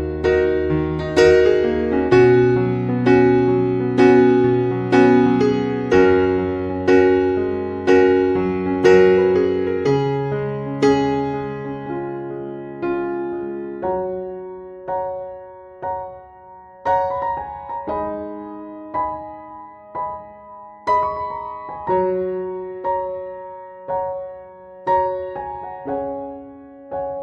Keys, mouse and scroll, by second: 3.1 Tab, 6.4 e, 14.4 Tab, 16.3 click, 18.9 KP_3, 21.7 KP_1, 23.6 KP_3.